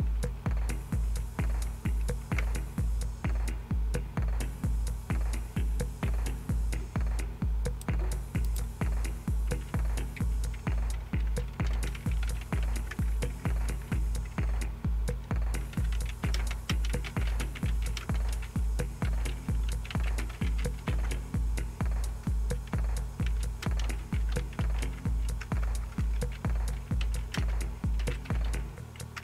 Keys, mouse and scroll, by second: 0.0-0.2 typing, 1.0 Delete, 1.5 Delete, 2.4 BackSpace, 7.7 click, 8.5 click, 10.9-13.5 typing, 13.7 Caps_Lock, 14.8-29.2 typing.